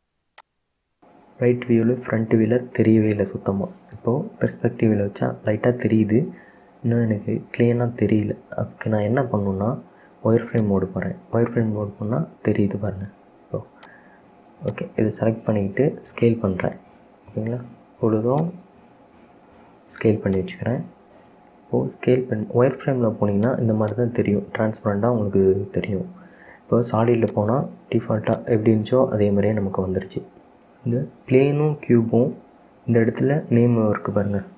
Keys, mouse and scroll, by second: 0.5 click, 1.9 KP_1, 3.6-5.1 middle drag, 5.1-7.3 scroll up 2, 10.7 click, 14.0 click, 14.7 click, 17.4 s, 19.6 s, 21.1-21.7 scroll down 3, 21.7 s, 24.0 click, 27.4 click, 28.5 click, 28.9-29.2 scroll up 2, 29.2-32.2 middle drag.